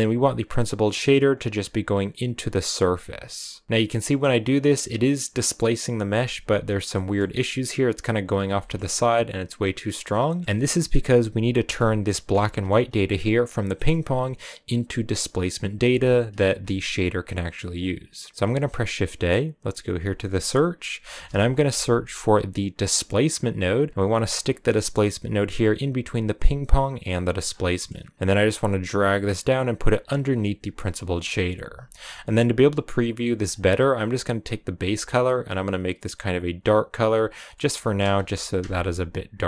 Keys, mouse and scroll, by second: 3.6 scroll down 9, 3.7-8.6 middle drag, 8.6-10.4 shift+scroll up 2, 10.4-12.1 middle drag, 12.1 ctrl+shift+click, 12.6-16.1 middle drag, 16.1 ctrl+shift+click, 27.4-27.8 scroll down 7, 27.8-30.2 middle drag, 30.2-35.5 drag, 36.8 click, 37.4 middle click, 38.1 KP_0, 39.3 shift+middle click.